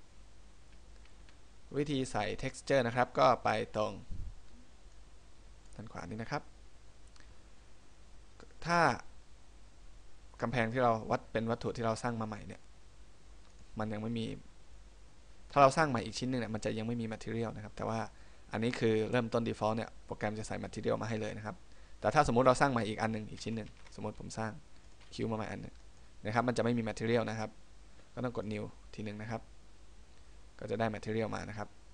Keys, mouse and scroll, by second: 1.3 KP_1, 5.1 click, 9.1 right click, 13.7 click, 23.8 shift+a, 26.0 click, 28.6 click.